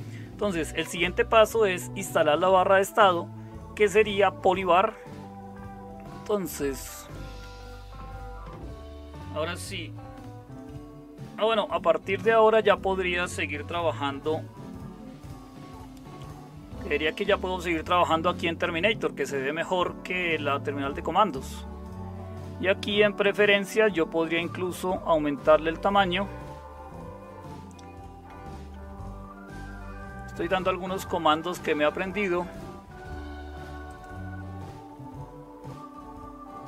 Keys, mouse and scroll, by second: 15.2 super+1, 28.2 super+m.